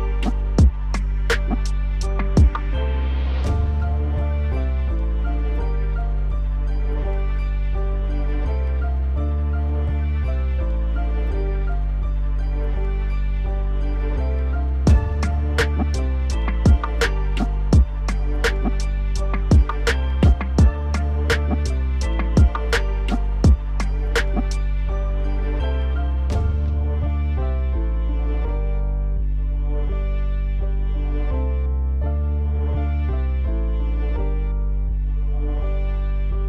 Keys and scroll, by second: 0.2 F4, 18.7 alt+w, 25.7 ctrl+a, 27.0 alt+w, 32.0 alt+w.